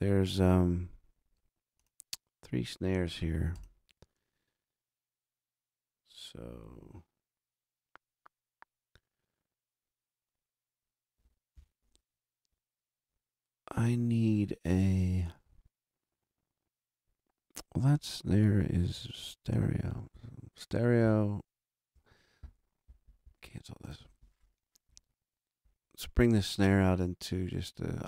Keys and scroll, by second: 11.5 shift+super+n, 20.1 super+Right, 21.0 super+Down.